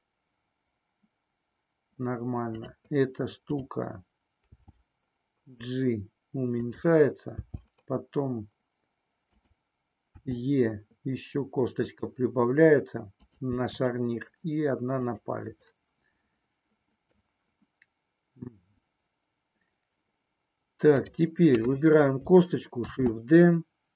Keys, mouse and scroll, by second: 4.5 g, 7.3 g, 9.3 click, 10.2 e, 13.2 click, 13.6 e, 15.8-17.2 middle drag, 20.8 click, 22.8 shift+d.